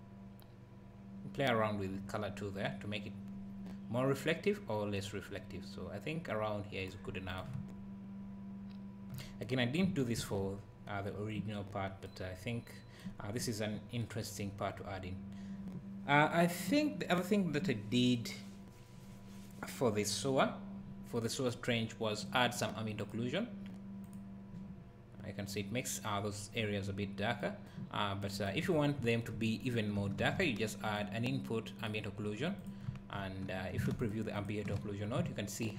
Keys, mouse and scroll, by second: 7.3 click, 7.6 `, 10.2 ctrl+s, 23.0 click, 27.4 click, 28.2 click, 28.8 scroll down 1, 29.0 `, 29.7 click, 30.2 shift+a, 32.7 click, 32.9 `, 34.1 ctrl+shift+click, 35.2 `.